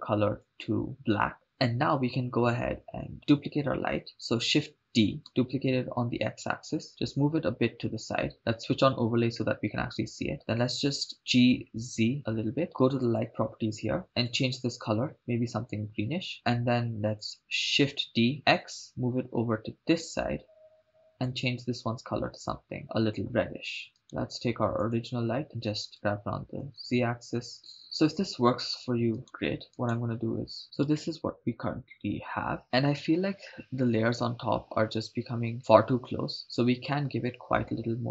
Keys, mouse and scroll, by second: 4.7 shift+d, 6.6 x, 7.5 click, 8.9 click, 10.6 g, 11.9 z, 12.7 click, 14.2 click, 18.4 shift+d, 18.7 x, 21.1 click, 21.7 click, 24.0 right click, 25.4 click, 26.2 g, 26.8 x, 27.5 z, 27.6 right click, 29.4 right click, 31.2 shift+space.